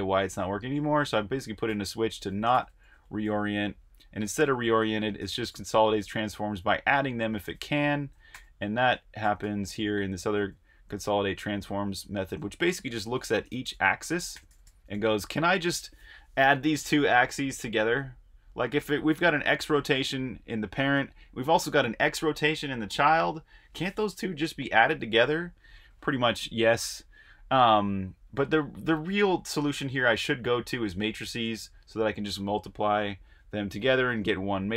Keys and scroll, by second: 0.0-11.5 typing, 12.8-13.5 typing.